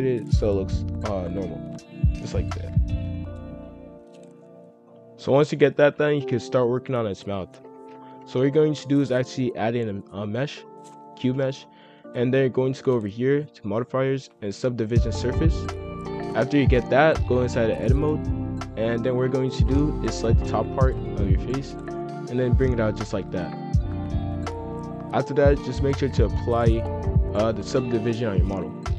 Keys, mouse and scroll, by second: 0.7 click, 1.8 scroll up 1, 1.8 middle click, 2.3-3.1 scroll down 1, 3.1-4.8 middle drag, 4.8 F3, 5.4-6.3 scroll down 2, 5.6-5.9 middle drag, 6.3-6.9 middle drag, 6.9-7.5 scroll up 1, 7.5 KP_5, 7.6 KP_1, 8.0 scroll down 1, 8.3 shift+a, 10.9-11.2 scroll up 1, 11.2 g, 12.4 click, 14.8-16.8 drag, 17.4-19.3 drag, 19.3 z, 19.9 click, 20.3 b, 21.3 s, 23.6-28.9 drag.